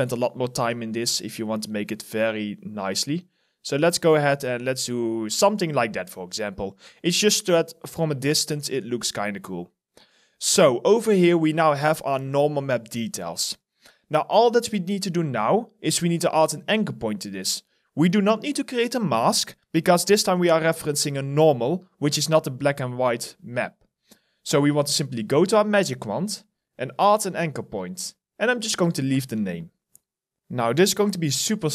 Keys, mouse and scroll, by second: 0.0 alt+middle click, 0.4 alt+right click, 0.6 alt+click, 1.0 alt+middle click, 2.7 ctrl+z, 4.3 ctrl+z, 5.7 alt+right click, 6.0 alt+click, 6.5 alt+middle click, 6.9 alt+right click, 7.2 alt+click, 8.4 alt+click, 9.4 alt+right click, 11.0 alt+middle click, 11.4 alt+right click.